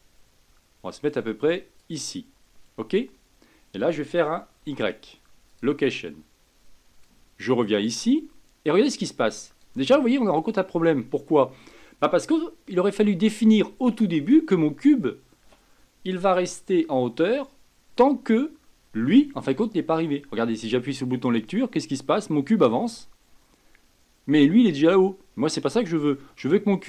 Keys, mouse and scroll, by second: 7.0-9.9 drag, 9.9 scroll down 4, 10.2-10.8 scroll up 1, 10.8-21.4 middle drag, 21.4 click, 24.8 click, 25.7-26.8 middle drag.